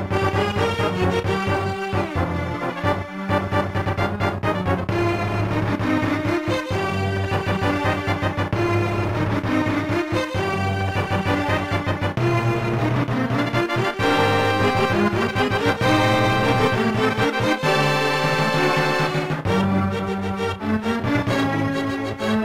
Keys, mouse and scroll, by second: 5.7 ctrl+s, 6.0 click, 7.3 scroll down 1, 17.3 click, 18.3 click, 19.5 0, 20.6 scroll down 1, 22.1-22.4 typing.